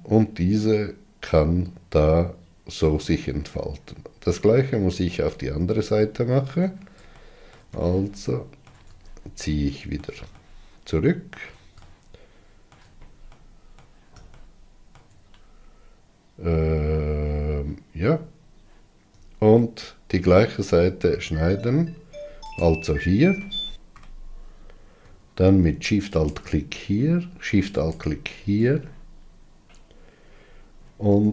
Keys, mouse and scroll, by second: 4.3-4.7 scroll down 4, 5.3-5.7 scroll down 3, 6.2 scroll up 1, 6.4-18.2 middle drag, 18.2-19.8 scroll up 2, 22.8 alt+shift+click, 26.8 alt+shift+click, 28.4 alt+shift+click.